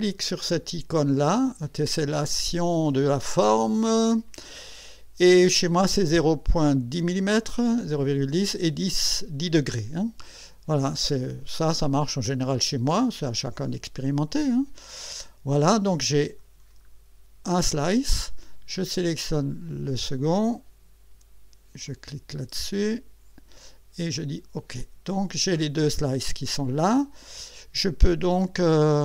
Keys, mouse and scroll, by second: 3.4 click, 14.5 click, 16.6-16.9 scroll down 2, 18.9 click, 21.8 click, 24.1 click, 25.0-25.7 scroll down 4, 27.2 click, 28.1 space.